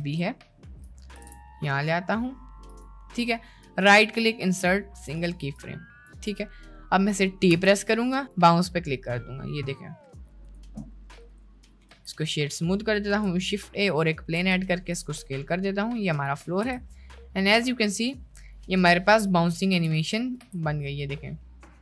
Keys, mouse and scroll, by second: 0.4-0.8 shift+middle drag, 1.2 g, 3.7 right click, 5.7 click, 7.5 t, 9.3 middle click, 10.1 space, 10.5 middle click, 16.0 shift+a, 16.0 s, 16.3 drag, 16.8 space, 20.2 click, 20.5 space.